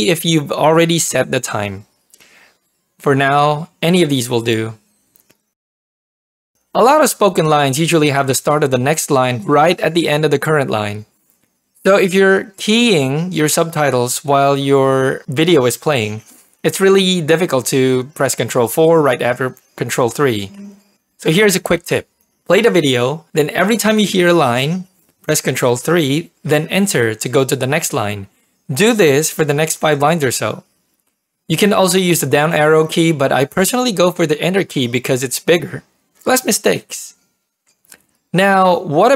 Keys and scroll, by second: 13.1 ctrl+p, 19.8 ctrl+4, 20.3 ctrl+3, 23.0 ctrl+p, 23.2 ctrl+3, 25.4 Return, 29.8 ctrl+3, 30.9 Return, 36.2 ctrl+3, 36.5 Return, 38.7 ctrl+3.